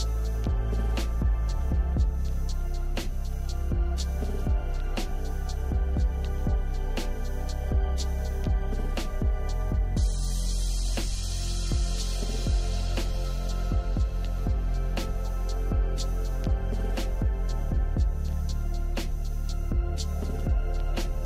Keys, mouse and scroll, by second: 6.9 ctrl+d.